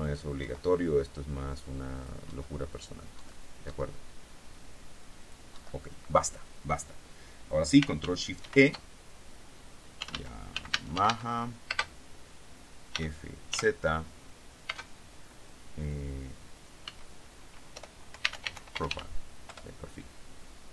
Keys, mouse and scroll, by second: 0.2 click, 0.7 Delete, 2.1 click, 2.4 Delete, 2.9 click, 3.3 Delete, 3.3 click, 5.4 click, 5.7 Delete, 8.6 ctrl+shift+e, 9.9-11.8 typing, 13.1 f, 14.8 space, 17.0-19.6 typing, 19.6 Return.